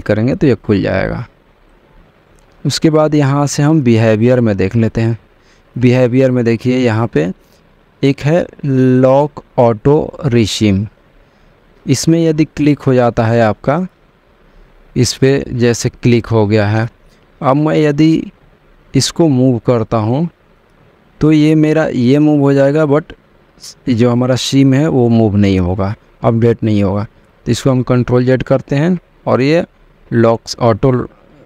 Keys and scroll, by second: 18.2 m, 27.7 ctrl+z.